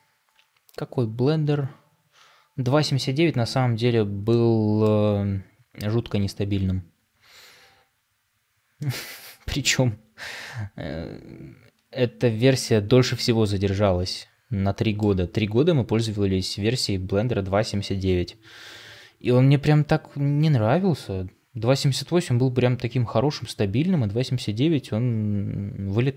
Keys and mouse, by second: 8.7-19.3 middle drag.